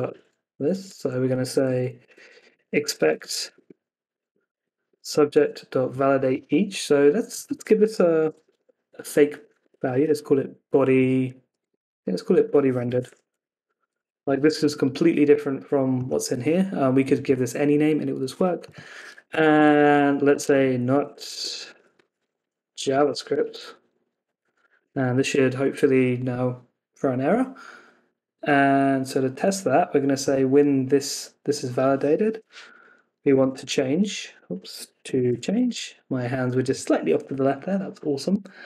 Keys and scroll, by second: 0.0 Escape, 0.5 Down, 0.9 Up, 3.6 Escape, 3.7 Down, 4.8 Escape, 4.9 Up, 5.9 Down, 9.6 Escape, 11.6 Escape, 14.1 Escape, 14.4 super+s, 19.5 Left, 23.3 Escape, 23.5 Left, 24.7 super+s.